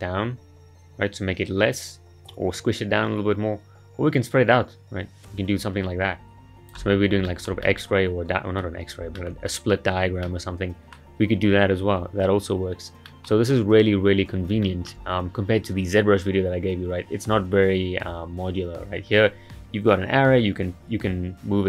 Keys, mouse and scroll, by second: 7.0 scroll down 4, 7.3-8.9 shift+middle drag, 8.9 scroll up 2, 9.2-11.9 shift+middle drag, 11.9-13.1 scroll down 2, 13.1-13.4 middle drag, 13.4-14.3 scroll up 2, 14.3 scroll down 2, 14.6-17.6 shift+middle drag.